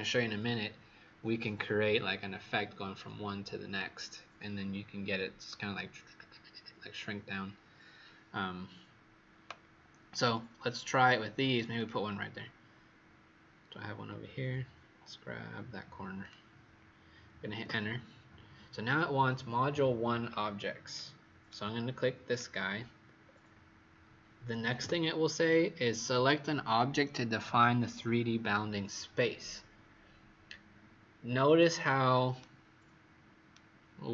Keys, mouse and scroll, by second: 13.7-15.0 scroll down 2, 16.2 click, 17.5 Return, 20.9 right click, 22.3 click, 23.2-24.8 scroll up 4, 24.8 Return, 32.3 right click, 34.0-34.1 scroll down 6.